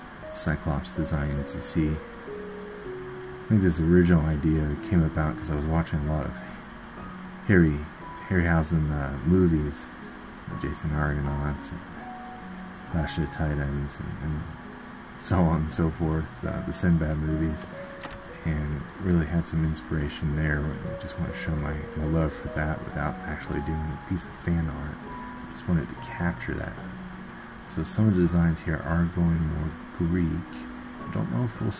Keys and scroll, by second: 10.0 ctrl+z, 10.4 typing, 12.0 typing.